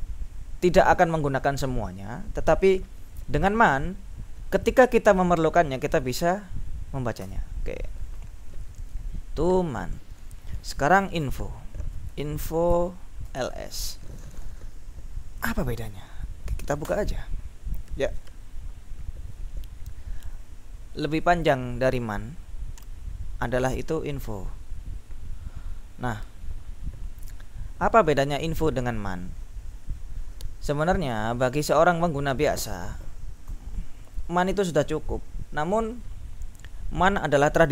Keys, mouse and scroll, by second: 7.3 q, 7.5 Tab, 11.8-14.0 typing, 16.9 Return, 21.0-22.1 drag, 22.5-24.0 scroll down 3, 24.2-24.8 scroll down 2, 26.4-27.1 scroll down 2, 27.1-28.9 scroll down 1, 28.9-31.6 scroll up 3, 33.5 q, 35.5 Up.